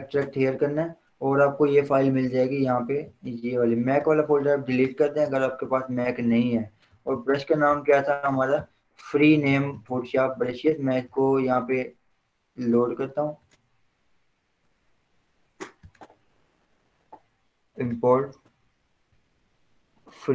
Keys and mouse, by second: 4.2 click, 4.8 ctrl+click, 8.6 Return, 9.8 click.